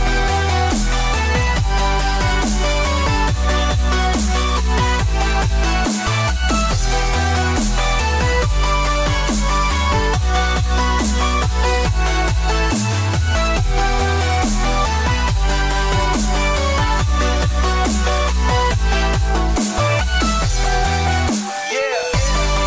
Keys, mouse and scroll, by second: 0.6 right click, 1.7 click, 2.4 ctrl+z, 3.0 ctrl+z, 5.6 ctrl+z, 5.6 ctrl+r, 8.7 click, 9.4 click, 12.0 click, 12.7 shift+click, 14.2 x, 16.7 ctrl+z, 17.7 middle click, 17.7 scroll up 1, 18.8 click, 19.5 click, 20.3 x, 22.2 click.